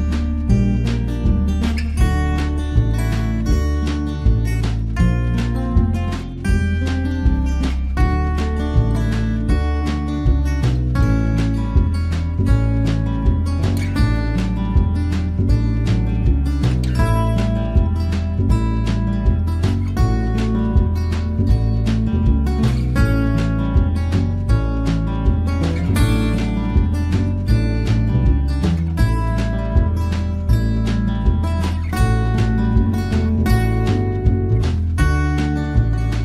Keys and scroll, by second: 0.2 ctrl+l, 4.1 ctrl+t.